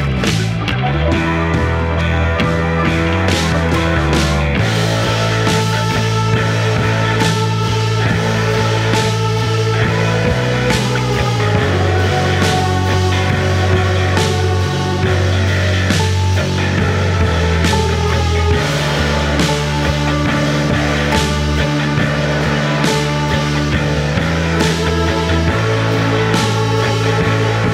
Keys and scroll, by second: 0.2 ctrl+d, 0.3 Escape, 6.5 F1, 12.8 F1, 25.6 4.